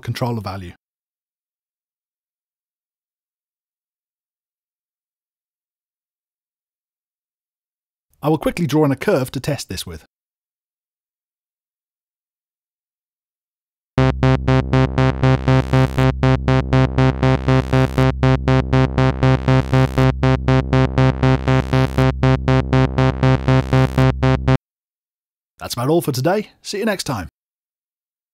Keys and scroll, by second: 14.0 space, 16.0 super+Tab, 17.2 super+Tab.